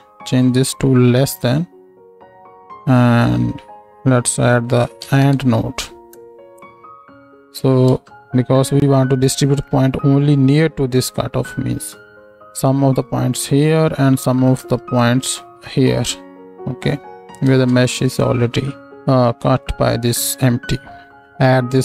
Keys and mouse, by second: 0.4-7.4 middle drag, 7.4-8.6 right drag, 7.9 ctrl+space, 8.6 click, 9.1-10.9 right drag, 10.9-16.8 drag, 16.8 right click, 17.5 ctrl+space, 17.5-21.1 ctrl+drag.